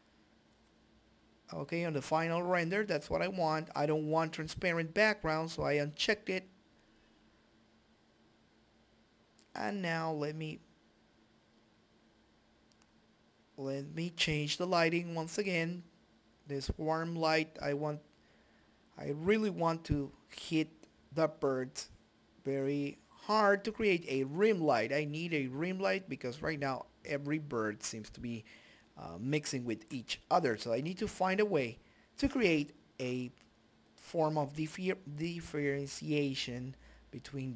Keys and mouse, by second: 8.6 middle click, 10.2 g, 11.9-13.8 drag, 14.0 click, 16.9 middle click, 19.2-20.9 drag, 24.9 shift+F3, 25.6-26.7 middle drag, 27.1 KP_Decimal.